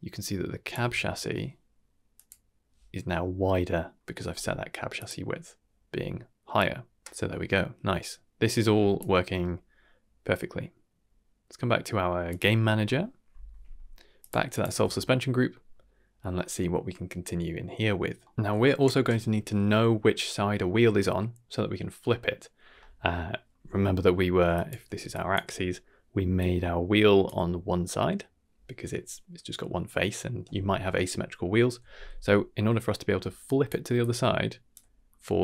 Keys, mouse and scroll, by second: 2.1 click, 4.9 click, 6.5-8.9 drag, 7.0 ctrl+z, 12.2 click, 12.8-13.7 middle drag, 14.2 click, 14.5 click, 14.6 Tab, 18.2 middle click, 23.3 middle click, 23.7 middle click, 24.4 d, 24.5 click, 24.9 d, 25.1 drag, 26.2 d, 26.4-27.2 drag, 27.2 d, 33.4 click, 33.6-34.0 d, 34.0 click, 34.7 d.